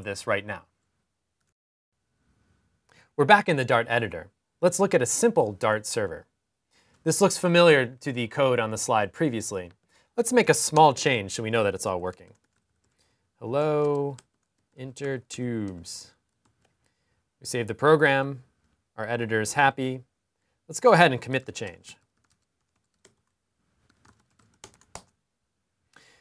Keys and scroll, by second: 12.3 typing, 13.6-15.4 typing, 16.2 super+s, 21.4-26.2 typing.